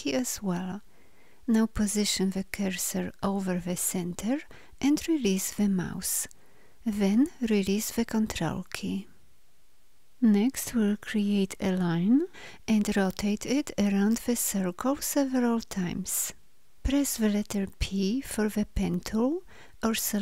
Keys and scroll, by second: 17.6 p.